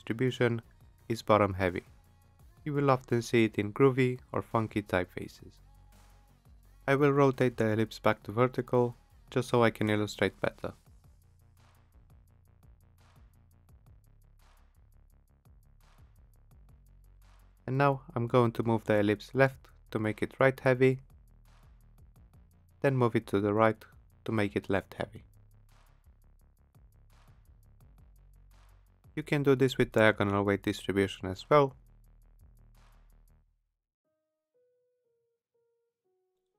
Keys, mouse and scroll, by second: 14.1 click, 14.1 click, 14.7-15.5 typing, 16.3 click, 17.5 click, 21.5 shift+Left, 22.0 shift+Left, 22.3 shift+Left, 22.5 shift+Left, 23.5 click, 25.2 click, 26.3 shift+Right, 26.6 shift+Right, 26.8 shift+Right, 27.1 shift+Right, 27.4 shift+Right, 27.7 shift+Right, 28.6 click, 32.2 click, 33.0 click, 35.6 click.